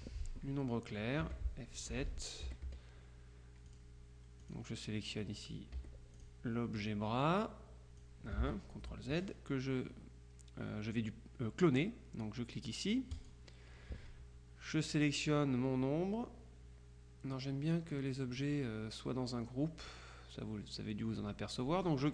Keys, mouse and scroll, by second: 1.3 F7, 1.9 click, 2.5 F1, 2.9 F2, 3.7 click, 4.5 click, 5.8 F1, 6.2 click, 6.9 click, 8.5 ctrl+z, 13.2 click, 14.9 click.